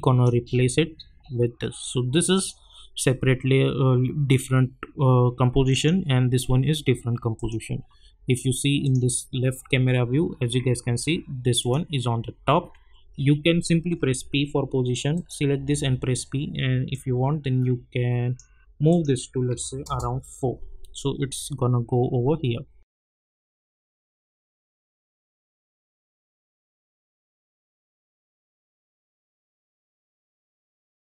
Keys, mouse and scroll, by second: 5.7 click, 8.9 click, 9.8 alt+scroll up 1, 11.6 click, 14.0 p, 15.1 click, 15.5 p, 16.9-18.9 drag, 19.8 Return, 22.9 click.